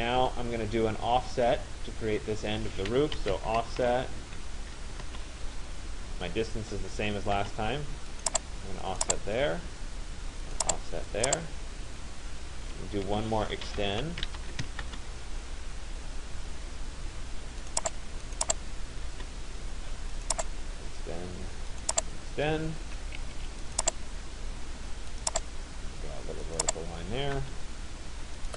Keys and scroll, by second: 2.9 o, 5.1 Return, 12.3 Escape, 14.9 Return, 18.8 Return, 22.9 Escape, 27.1 Return.